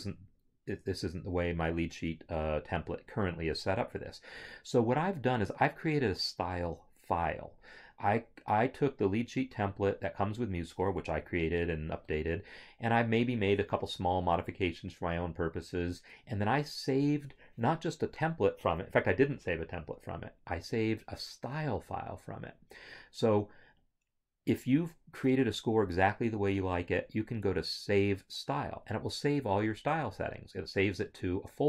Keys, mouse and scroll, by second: 19.9 scroll, 19.9 click, 30.1 click.